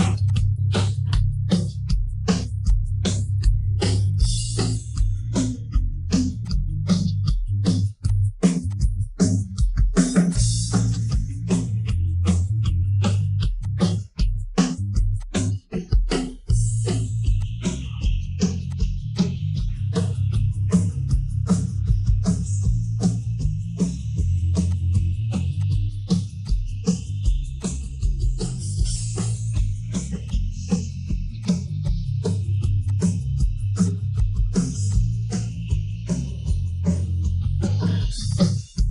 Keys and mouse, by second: 1.1 drag, 2.1 ctrl+a, 4.7-6.1 middle drag, 6.6 middle drag, 7.4 middle click, 10.0 ctrl+j, 11.0-13.4 middle drag, 13.8 middle click, 15.1 click, 15.9 KP_1, 16.6 KP_3, 17.3-18.2 drag, 18.6 click, 19.1 click, 20.4 Tab, 22.2 Tab, 22.7 Tab, 23.6 l, 24.2 l, 25.5 drag, 26.4-27.8 drag, 28.2 middle click, 30.2 click, 31.4 click, 31.8 click, 32.9 click, 33.8 click, 34.1 click, 34.9 click, 35.9 KP_1, 37.0-38.3 typing, 37.8 click, 38.3 click.